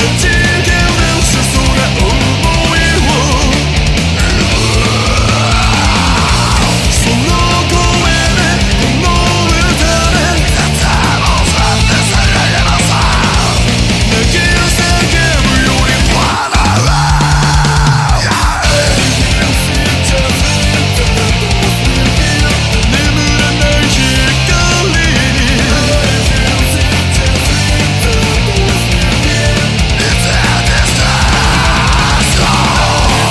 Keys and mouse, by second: 16.4 ctrl+z, 17.5 ctrl+z, 20.4 ctrl+z.